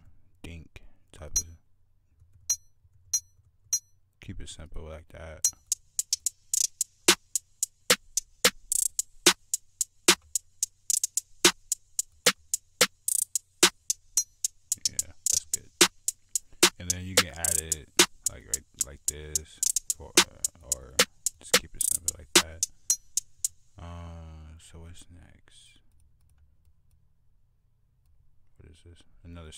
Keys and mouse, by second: 3.8 click, 4.1 click, 4.5 click, 5.3 click, 5.6 click, 5.9 click, 15.5 click, 15.8 click, 16.3 F1, 16.4 right click, 22.8 click, 22.9 click, 23.2 click, 23.4 F1, 23.5 click, 25.6 click, 25.8 click.